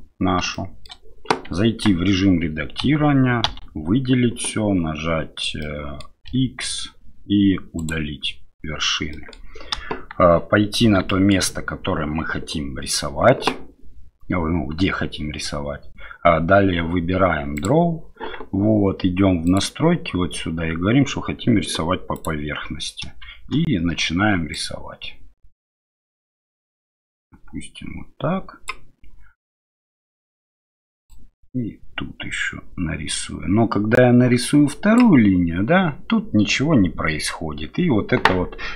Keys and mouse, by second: 0.5-0.9 shift+middle drag, 1.6 Tab, 2.8 a, 3.5 a, 5.6 middle click, 6.2 x, 9.1 middle click, 9.8 KP_1, 11.1 shift+middle click, 22.2 click, 24.5-38.7 drag.